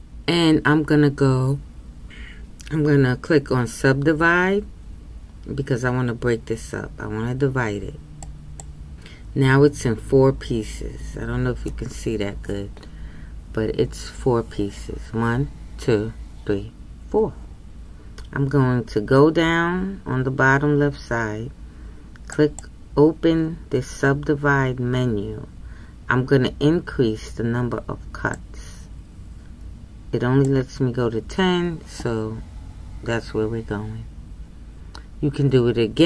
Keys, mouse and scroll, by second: 8.6 click, 28.7-36.0 drag.